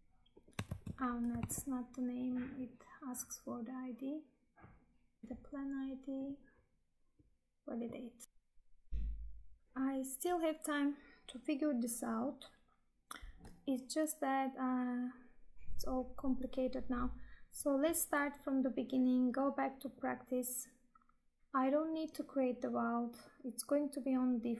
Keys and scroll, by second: 0.6 ctrl+v, 1.5 Tab, 5.2 ctrl+v.